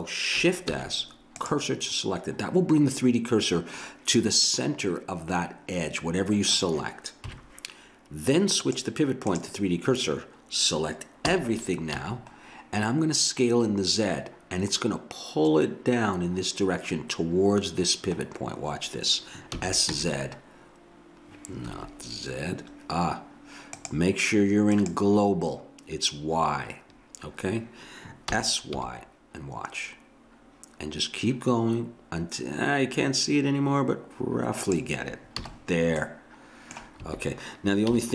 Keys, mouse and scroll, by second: 0.7 shift+s, 4.5 middle click, 4.9 middle click, 5.7 middle click, 7.3 KP_3, 11.3 a, 12.0 a, 19.6 s, 23.8-26.6 drag, 28.3 s, 35.4 a, 37.1 a, 37.9 a.